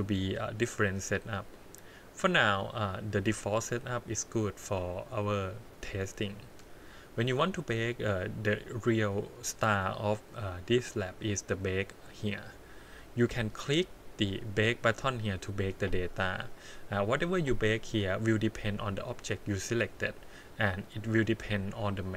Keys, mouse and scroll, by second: 2.7 click, 5.4 click, 6.7-7.8 scroll down 3, 11.2 click, 12.4-13.7 scroll down 10, 14.1 scroll up 2, 18.6 click, 19.0 click, 21.1 click, 21.7-22.1 scroll up 9.